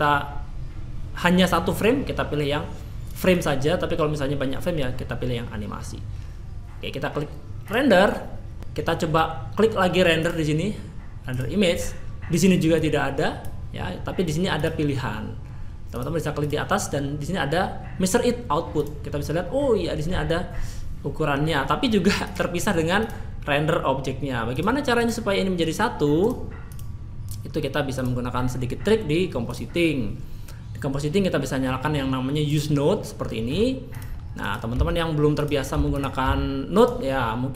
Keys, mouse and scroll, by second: 3.1 click, 7.6 click, 8.6 n, 10.2 click.